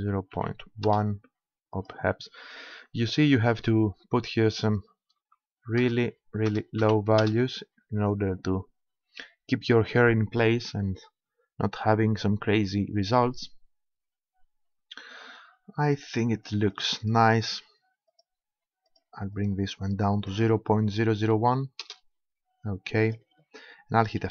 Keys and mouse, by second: 1.8-3.6 drag, 12.8-16.8 middle drag, 16.8-20.8 drag, 23.0-24.3 middle drag.